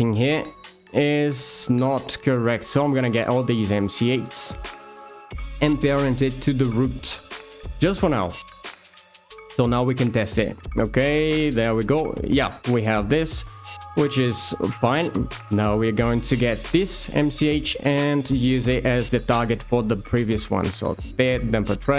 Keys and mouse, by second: 3.3 alt+shift+click, 4.8 shift+click, 5.3 d, 7.7 shift+middle click, 8.4 shift+middle click, 8.9 Tab, 9.8 click, 11.2 g, 15.4 click, 18.2 shift+click, 19.7 d.